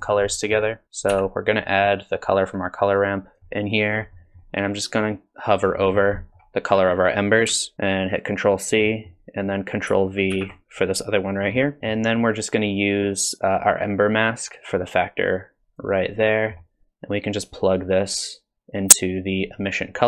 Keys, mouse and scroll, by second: 0.0-0.5 scroll down 3, 0.3 middle click, 0.8 ctrl+c, 0.8 click, 1.1 x, 2.1 click, 4.2 middle click, 5.7-6.4 scroll up 10, 6.2 middle click, 7.7 ctrl+c, 8.8 middle click, 10.3 ctrl+v, 11.4-11.8 scroll down 5, 11.8 middle click, 13.2 click, 14.2 click, 16.2 middle click, 17.5 click.